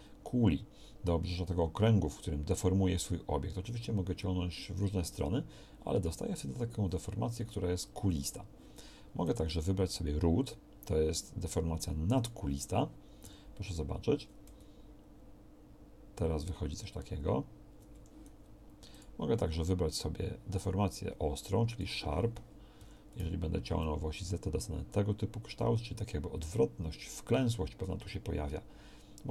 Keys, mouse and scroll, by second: 13.2 g, 22.8 g.